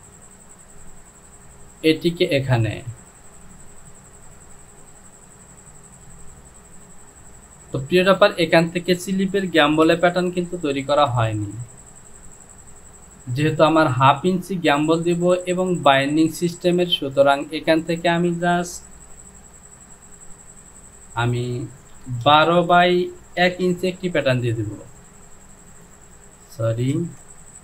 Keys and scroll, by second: 9.9 shift+z, 10.5 shift+z, 22.1 KP_1, 22.3 KP_2, 22.5 Down, 23.5 KP_1, 23.7 Down, 27.0 ctrl+z.